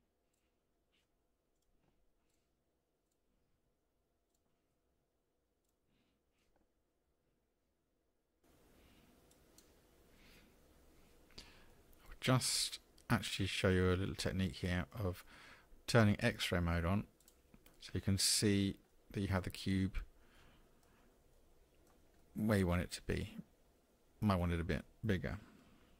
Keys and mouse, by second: 1.5 shift+click, 2.3-3.1 drag, 3.7 s, 4.7 r, 6.0-6.4 middle drag, 9.3 middle click, 11.7-14.9 middle drag, 17.7 middle click, 18.9 click, 18.9-19.4 middle drag, 20.3 middle click, 21.4-21.9 shift+drag, 22.2-23.4 middle drag, 23.4-24.2 drag.